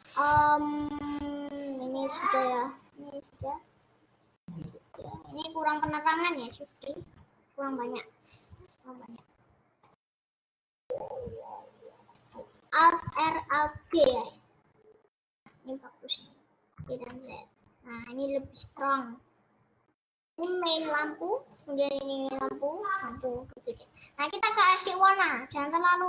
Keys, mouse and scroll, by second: 0.0-2.8 middle drag, 3.0-5.3 middle drag, 5.3-5.8 scroll down 7, 5.8-6.9 middle drag, 6.9 shift+d, 9.5-9.9 scroll down 2, 9.9 middle click, 10.4 click, 12.6-13.0 scroll down 1, 13.0 alt+r, 13.8 alt+g, 15.1-15.8 scroll up 12, 15.8-16.6 scroll down 8, 16.8 g, 18.2-18.6 scroll up 4, 18.6-20.0 middle drag, 20.0-20.9 scroll down 6, 21.7 click, 23.3 click, 25.2 click.